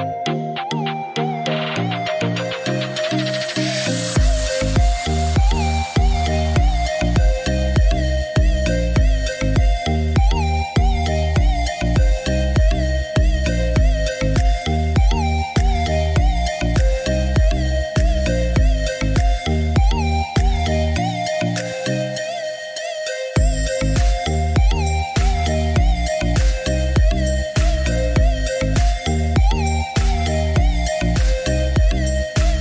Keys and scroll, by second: 5.7 Escape, 11.6 3, 12.1 Return, 15.2-16.1 typing, 23.2 3, 23.5 Return, 29.6 9, 30.0 Return.